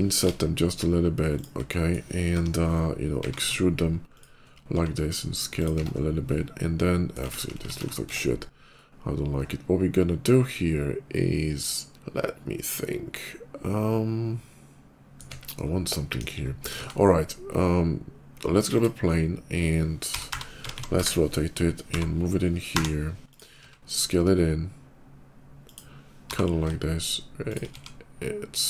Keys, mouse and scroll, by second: 0.0 shift+z, 1.2 shift+click, 1.6 middle click, 2.1 o, 2.9 e, 4.0 click, 4.6 s, 5.4 click, 5.6 Tab, 5.8 middle click, 6.1 middle click, 6.9 click, 7.1 ctrl+z, 7.4 ctrl+z, 7.9 Tab, 8.6 click, 10.7-15.0 middle drag, 15.8 KP_5, 16.1 middle click, 16.4 shift+middle click, 16.6 KP_5, 16.6 shift+a, 18.4 click, 18.9 middle click, 20.0-23.2 typing, 20.8 Return, 23.1 click, 25.5 click, 25.8 middle click, 26.1 g, 26.8 g, 27.3 shift+click, 27.6 s, 28.5 click.